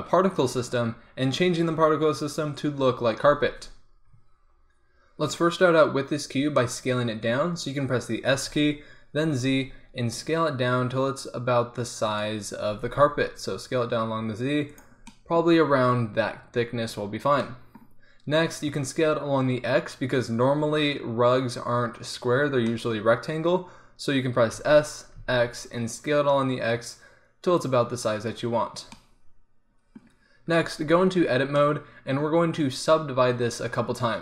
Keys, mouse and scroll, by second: 5.2-6.7 middle drag, 8.5 s, 12.7 s, 15.2-21.5 middle drag, 24.6 s, 30.5 Tab, 31.0 middle click, 33.7-34.2 middle drag.